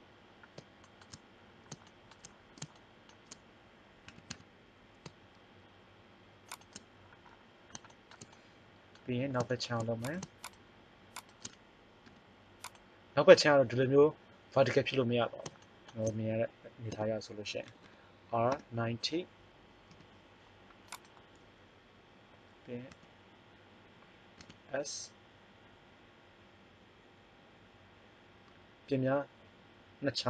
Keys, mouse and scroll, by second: 1.5 middle click, 4.1 s, 10.0-11.9 right drag, 11.9 u, 15.4-16.8 middle drag, 16.8 r, 20.0 g, 20.6 middle click, 23.0 s, 24.3 s.